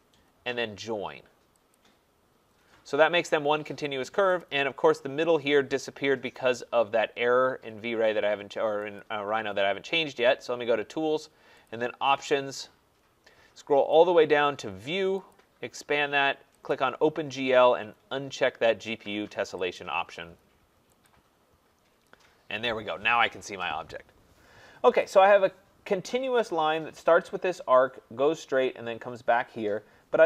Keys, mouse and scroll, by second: 1.7 click, 9.0 click, 11.7 click, 13.9 click, 15.3 click, 19.8 click, 21.1 click, 25.2 click.